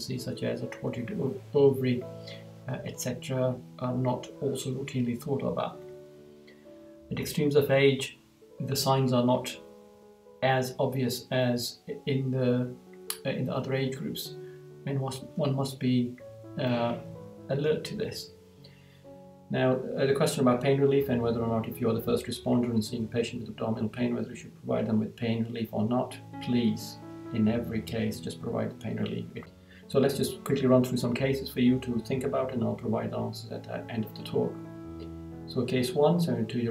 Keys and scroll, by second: 5.8 Right, 18.0 Right, 29.4 Right, 34.3 Right.